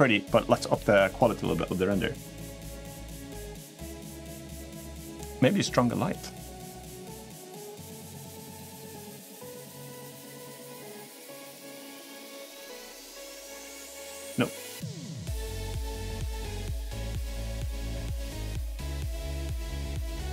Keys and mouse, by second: 2.7 middle click, 4.0 click, 16.0-17.2 middle drag, 17.9-18.6 middle drag, 20.2-20.3 drag.